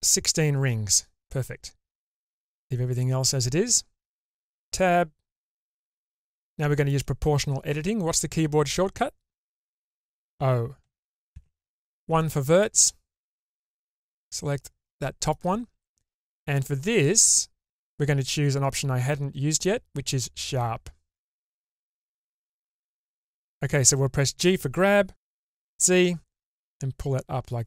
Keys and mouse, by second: 4.5 Tab, 6.2 shift+middle click, 10.8 0, 11.3 1, 12.2 middle click, 13.7 click, 14.2-15.3 middle drag, 22.5 shift+middle click, 25.4 g.